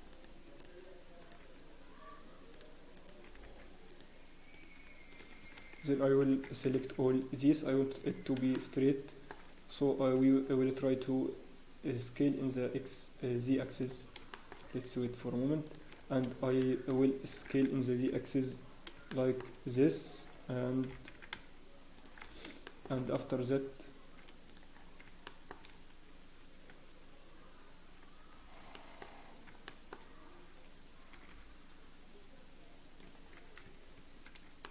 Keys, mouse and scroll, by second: 1.4 g, 2.9 click, 3.2 g, 4.7 g, 5.5-6.0 scroll down 1, 6.0 a, 6.3-6.6 scroll down 1, 6.6 b, 8.2 scroll down 1, 8.5 shift+middle click, 9.7-11.5 scroll down 4, 10.0 b, 14.0 scroll down 1, 14.3 shift+middle click, 14.6-15.2 scroll down 2, 15.6 shift+click, 15.9 scroll down 1, 16.6 shift+middle click, 17.0-17.3 scroll down 7, 17.3 s, 19.1 shift+middle click, 19.1-19.5 scroll up 5, 20.8 g, 22.2 scroll down 1, 22.6 shift+middle click, 22.9 scroll down 4, 24.4 click, 24.7 scroll down 1, 25.2 shift+middle click, 28.3 scroll down 1, 28.7 shift+middle click, 29.1-29.6 scroll down 3, 29.6 shift+middle click, 30.0-31.1 scroll up 4, 31.1 g, 33.3 scroll down 1, 33.6 Tab, 33.8-34.2 scroll down 5, 33.9 Tab, 34.2 scroll up 1.